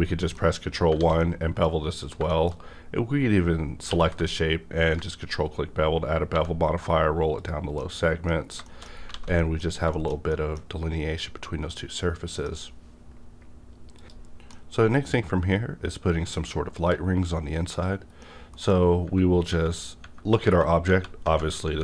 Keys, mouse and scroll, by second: 0.3 middle click, 0.7 scroll down 1, 0.9 alt+a, 1.2 middle click, 1.2 middle click, 2.0 click, 2.5 shift+scroll down 1, 3.8 q, 4.8 ctrl+click, 5.5 scroll down 1, 6.3 1, 6.8-7.4 scroll down 1, 7.4 click, 7.8 middle click, 8.4-9.0 scroll down 3, 8.6 shift+middle click, 9.1 alt+a, 9.5-9.8 scroll down 1, 9.9 shift+middle click, 10.3 shift+middle click, 11.8 middle click, 11.8 scroll down 1, 15.0 middle click, 15.0 scroll up 1, 17.7 click, 17.7-18.2 scroll up 1, 18.2 middle click, 18.2 middle click, 18.8 scroll up 1, 19.0 Tab, 19.5 Right.